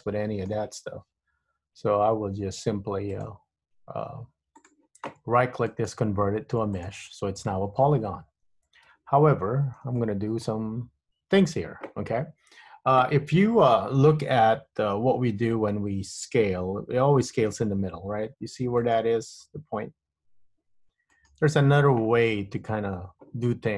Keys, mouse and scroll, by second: 3.3 click, 5.8 right click, 9.0 Tab, 9.5-10.0 scroll up 1, 10.1 shift+middle click, 11.1-14.0 scroll up 1, 15.6 Tab, 17.2 s, 20.3 s.